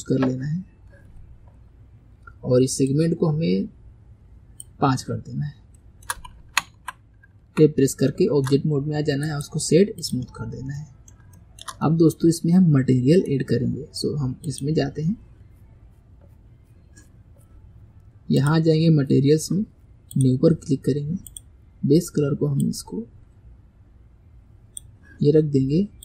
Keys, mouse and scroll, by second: 2.9-5.8 drag, 5.8 shift+middle click, 7.4 Tab, 8.1-9.3 shift+middle drag, 9.3-10.5 right drag, 10.5-10.8 scroll down 2, 10.8-16.3 middle drag, 16.3 click, 18.4-21.5 drag, 25.5-26.0 scroll up 1.